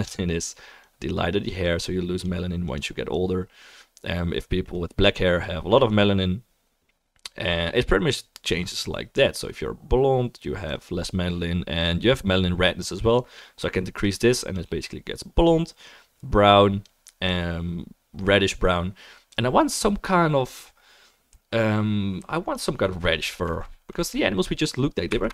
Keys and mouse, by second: 0.2-2.8 drag, 0.2-3.3 middle drag, 0.2-3.4 right drag, 3.1-13.8 drag, 3.7-9.9 right drag, 3.8-7.9 middle drag, 8.1 middle click, 9.1 middle click, 13.8-17.2 middle drag.